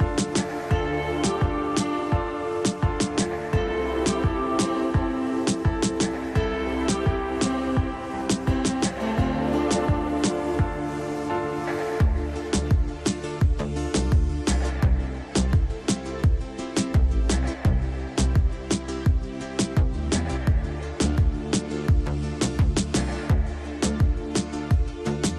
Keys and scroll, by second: 2.6 shift+F2, 3.0 Escape, 3.7 F3, 6.6 F2, 9.9 space, 10.5 e, 11.1 Escape, 13.0 ctrl+q, 15.6 space, 20.3 space, 23.3 Delete, 24.3 F3.